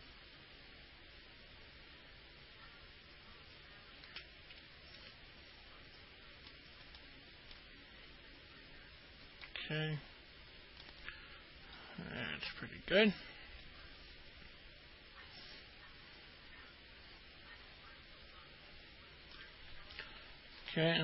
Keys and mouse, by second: 0.0-4.3 shift+drag, 5.2-6.7 alt+middle drag, 7.2 alt+middle click, 9.7-11.0 alt+middle drag, 12.0-13.3 alt+middle drag, 13.8-19.5 alt+middle drag.